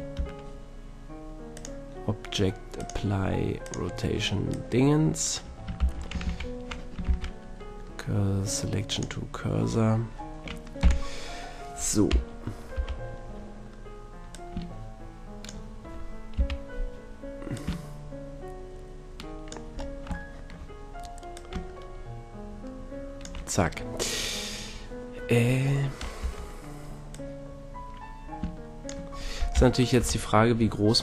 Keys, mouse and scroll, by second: 0.2 Tab, 4.5-5.8 drag, 5.8 shift+c, 6.3 shift+a, 7.1 shift+s, 10.8 t, 11.5 click, 12.1 KP_3, 12.7 KP_1, 15.6-16.2 drag, 16.3 KP_3, 17.5-19.3 drag, 19.7-20.8 middle drag, 21.3-23.2 drag, 26.2 Tab, 27.1-29.0 drag, 29.5 KP_3, 30.0 KP_1, 30.9-31.0 drag.